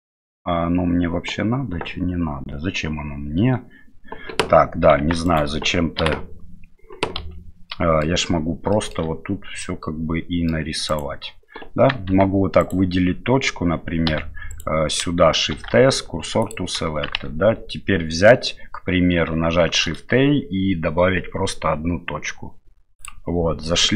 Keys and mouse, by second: 5.0 Tab, 5.2 right click, 6.0 Delete, 7.2 KP_Divide, 7.7-8.0 middle drag, 8.7 shift+middle click, 9.6 middle click, 10.9 right click, 12.1 Tab, 14.1 1, 14.5 right click, 15.5 shift+s, 17.2 Tab, 19.6 shift+a.